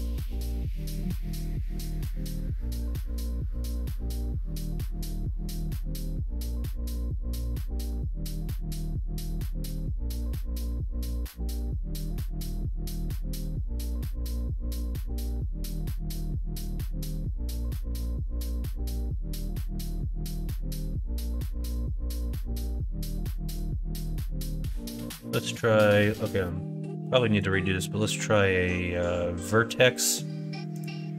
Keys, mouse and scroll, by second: 1.3 KP_1, 1.8 KP_3, 3.8 ctrl+right click, 4.6 middle click, 6.2 3, 6.5 click, 7.0 shift+click, 8.1 shift+click, 8.8 e, 10.9 middle click, 12.1 middle click, 13.1 middle click, 13.6 middle click, 14.1 ctrl+r, 15.3 middle click, 15.7 ctrl+r, 17.2 middle click, 17.9 KP_1, 18.1 KP_3, 19.3 3, 19.7 click, 20.1-22.3 drag, 27.3-30.8 drag.